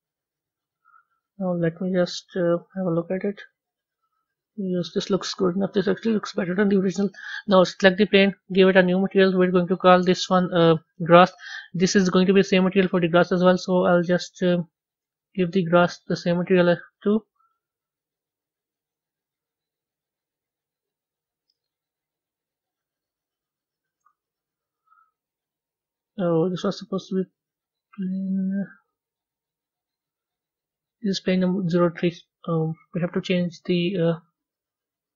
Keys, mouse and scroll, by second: 0.0-1.6 drag, 1.6 a, 3.1 z, 4.0-6.4 middle drag, 6.4 z, 7.1 click, 8.6-9.5 drag, 12.0 s, 16.3 click, 17.4-21.0 drag, 22.6 click, 24.5 click, 32.3 click, 33.0 click.